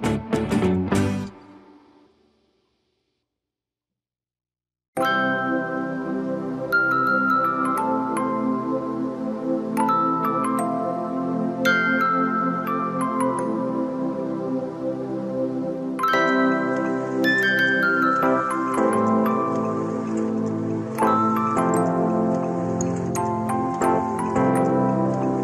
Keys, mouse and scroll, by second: 0.0 scroll up 3, 0.2 click, 0.2 middle click, 0.3 Tab, 0.4 shift+click, 1.2 middle click, 1.6 ctrl+z, 1.8 click, 2.2 middle click, 2.2 scroll down 4, 2.4 scroll up 2, 2.7 middle click, 2.9 middle click, 3.1-5.6 typing, 3.3 click, 3.6 click, 4.4 scroll down 3, 4.6 click, 5.3 middle click, 5.5 scroll down 2, 6.5 shift+middle click, 6.7 click, 7.4 r, 7.5 r, 7.8 r, 8.0 click, 8.2 r, 8.4 click, 8.6 shift+middle click, 8.9 middle click, 9.0 click, 9.4-9.8 middle drag, 10.0 middle click, 10.2-10.5 drag, 10.7-11.0 right drag, 11.2 click, 11.4 middle click, 11.6 g, 11.8 r, 12.0 g, 12.3 r, 12.5 right click, 12.7 click, 12.9-13.2 right drag, 13.5 click, 13.5-15.3 typing, 13.7 drag, 13.9 click, 14.3 click, 14.8 click, 15.4 click, 15.9-16.5 drag, 16.7 a, 16.9 click, 17.1-17.4 ctrl+z, 17.5 click, 17.9 a, 18.0-18.3 drag, 18.9 click, 19.0-19.3 right drag, 19.5-19.8 drag, 20.0 click, 20.2-22.9 typing, 20.7 click, 21.3 right click, 21.5 click, 22.0 drag, 22.4 click, 22.6 click, 22.9-23.3 drag, 23.6 click, 23.9 click, 24.0 a, 24.2-24.5 drag, 24.8 a, 24.8 right click, 25.1 click, 25.3 a.